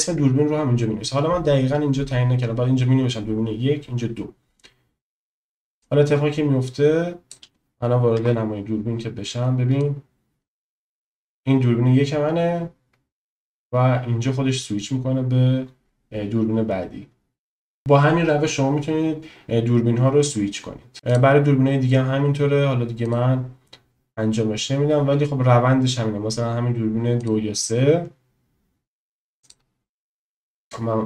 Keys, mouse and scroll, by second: 5.9 click, 8.2 KP_0, 9.9-20.9 drag, 27.2 click.